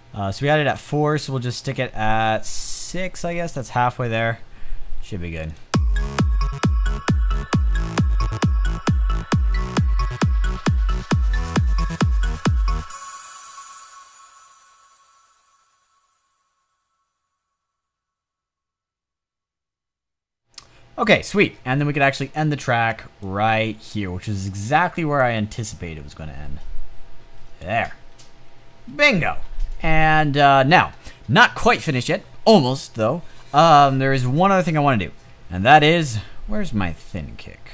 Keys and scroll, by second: 22.5 space.